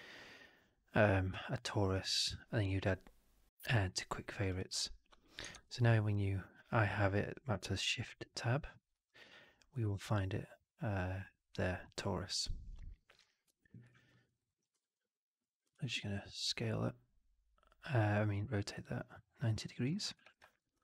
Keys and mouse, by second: 5.4 shift+Tab, 14.0 alt+middle click, 14.3 alt+right click, 14.6 e, 15.4-19.8 ctrl+drag, 20.0 r.